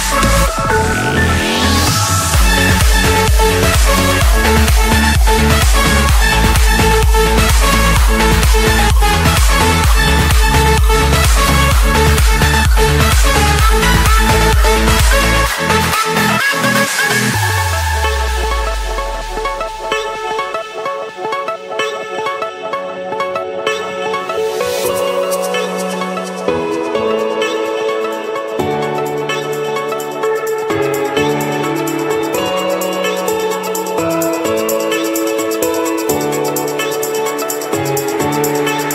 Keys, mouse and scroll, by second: 0.6 click, 3.5 click, 4.4 click, 7.1 click, 7.8-8.1 scroll up 2, 8.4-8.8 scroll down 2, 9.0-9.5 scroll up 3, 9.8 Escape, 12.6-14.3 typing, 15.1 Return, 16.8 click, 17.4 Return, 24.3 8, 25.6 Return, 29.5 click, 31.2 typing, 32.6-33.1 typing, 34.1 Return, 37.9-38.4 typing.